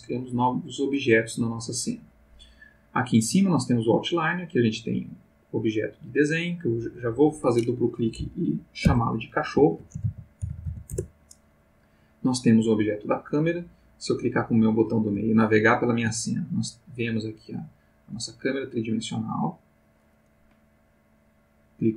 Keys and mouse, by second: 6.6 click, 8.9-10.6 typing, 10.9 Return, 12.8 click, 14.3-17.0 middle drag, 17.7-20.0 middle drag.